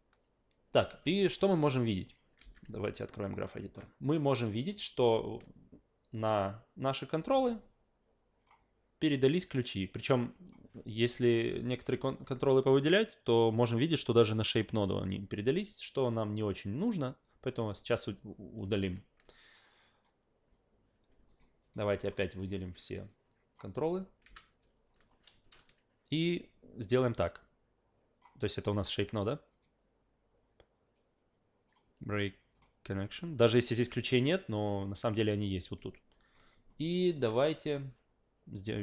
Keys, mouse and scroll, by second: 1.4 alt+middle click, 1.7 alt+right click, 2.0 alt+click, 2.4 alt+g, 3.7 alt+middle click, 4.7 alt+right click, 4.9 alt+middle click, 5.1 alt+right click, 6.2 click, 7.3 a, 8.4 click, 9.0 click, 14.0 click, 15.0 click, 17.0 click, 19.9 click, 21.3 alt+right click, 21.6 alt+right click, 21.9 alt+middle click, 22.3 alt+right click, 23.1 click, 24.2 f, 24.9 alt+middle click, 27.3 click, 29.5 right click, 31.7 click, 32.5 click, 34.7 click, 36.2 alt+right click, 36.5 alt+middle click, 36.8 alt+right click, 37.1 alt+middle click, 37.5 click.